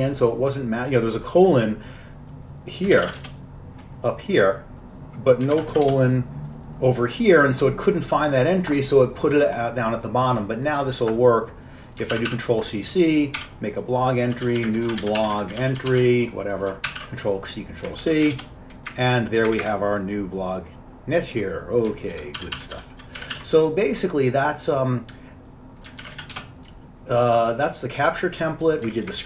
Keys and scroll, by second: 3.0 ctrl+x, 3.1 b, 3.3 Return, 5.6 ctrl+x, 5.8 b, 6.0 Return, 12.2 ctrl+c, 13.5-16.6 typing, 17.0 ctrl+c, 17.1 ctrl+c, 18.1 ctrl+x, 18.2-23.1 typing, 23.3 ctrl+x, 23.4 ctrl+s, 26.1 ctrl+x, 26.2 b, 26.4 Return.